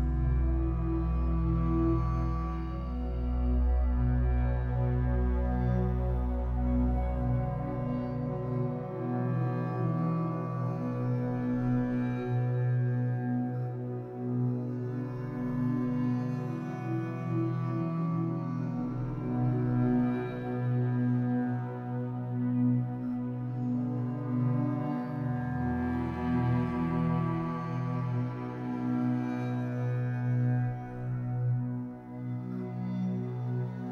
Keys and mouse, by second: 0.0-1.1 drag, 1.3 alt+click, 2.5 ctrl+alt+click, 2.9 alt+shift+click, 3.4 ctrl+alt+click, 4.0 alt+shift+click, 4.8 alt+shift+click, 5.3-6.3 ctrl+alt+drag, 8.0-11.2 shift+drag, 12.4 click, 14.1 3, 15.4 click, 16.6 alt+shift+click, 17.7 ctrl+alt+click, 18.3 alt+click, 19.2 alt+shift+click, 19.9 ctrl+alt+click, 23.1-29.8 shift+drag, 31.2-33.6 alt+drag.